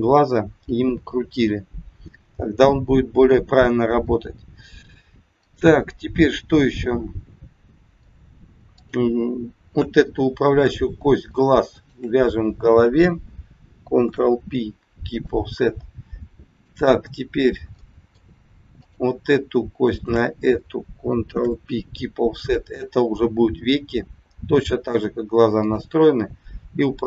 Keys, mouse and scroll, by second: 1.2-1.6 scroll down 3, 5.4 middle click, 8.7 click, 10.1 scroll up 2, 11.7 shift+click, 13.9 ctrl+p, 15.4 scroll down 2, 16.4 click, 17.7 middle click, 18.7 click, 19.8 shift+click, 21.2 ctrl+p, 22.9 middle click, 25.6 click.